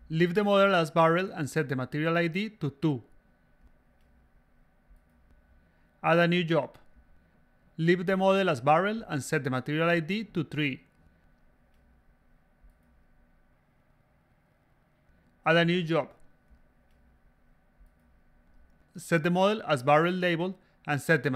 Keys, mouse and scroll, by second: 0.0-0.9 typing, 2.5 click, 4.0 click, 4.4 5, 4.8 3, 6.1 click, 6.9 click, 7.2-9.4 typing, 11.1 click, 11.5 click, 12.2 click, 13.5-15.3 typing, 16.4 click, 17.0 click, 17.1-18.2 typing, 18.9-19.7 drag, 21.1 click.